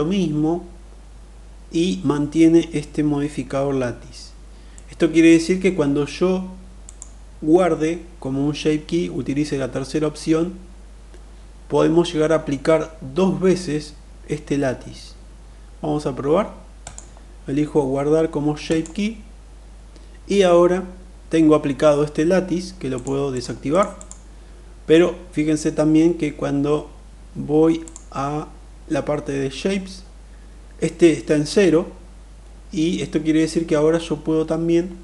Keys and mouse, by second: 4.2 middle click, 6.4-11.0 drag, 16.3-18.4 drag, 22.5 click, 22.8 click, 23.3 click, 23.5 click, 27.5 click.